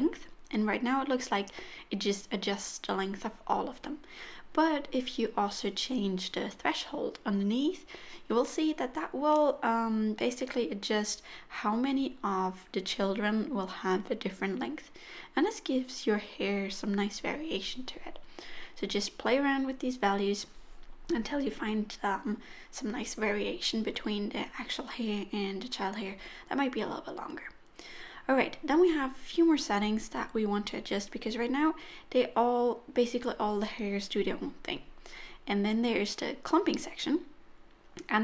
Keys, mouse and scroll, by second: 11.4 click, 22.0 middle click, 25.6 middle click, 31.8-35.5 scroll down 3, 36.1 click, 36.9-37.9 scroll down 2.